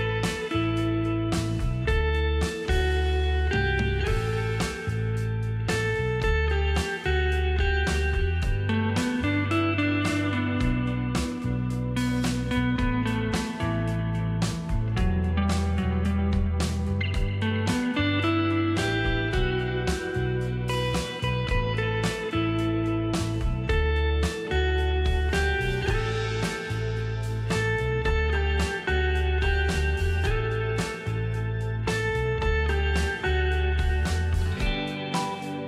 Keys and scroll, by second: 8.1 ctrl+KP_0, 8.6 ctrl+space, 17.0 shift+space, 21.2 shift+space, 23.6 shift+space.